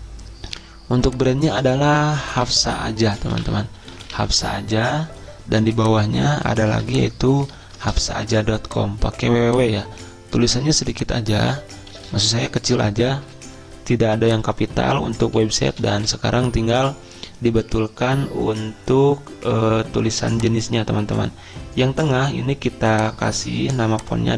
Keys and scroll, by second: 2.0 Return, 2.2-4.7 typing, 6.5-8.2 typing, 12.0-13.8 typing, 15.5-17.6 typing.